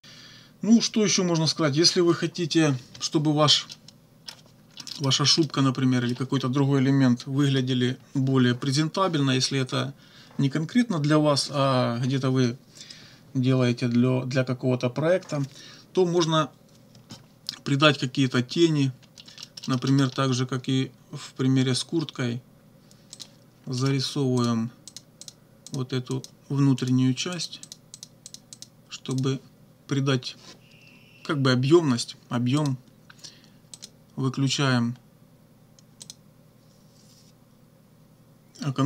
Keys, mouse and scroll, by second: 3.7 click, 4.8 click, 5.4 click, 7.4 -, 19.4 middle click, 23.2 click, 23.8 middle click, 24.4 click, 24.9 click, 25.2 click, 25.7 click, 26.2 click, 26.8 click, 27.4 click, 28.3 click, 29.2 click, 32.6 click, 33.8 click, 36.0 click.